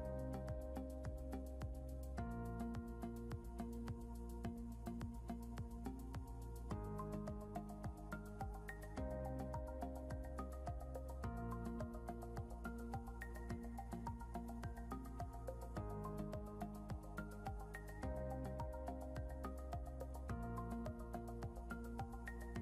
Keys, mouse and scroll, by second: 1.2 click, 1.6 scroll down 1, 2.2 click, 4.3 click, 6.3 scroll up 1, 6.8 click, 12.1 scroll down 1, 13.6 scroll up 1, 14.0 click, 17.7 scroll down 1, 18.7 click.